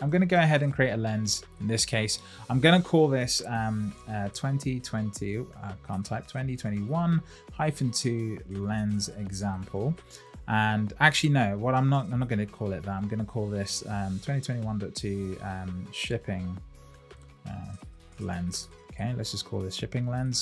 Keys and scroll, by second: 4.3 shift+2, 16.1 shift+s.